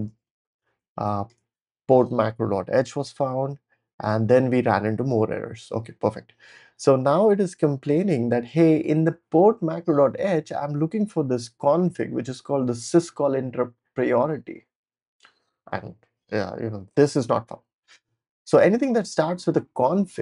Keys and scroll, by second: 0.0-1.8 typing.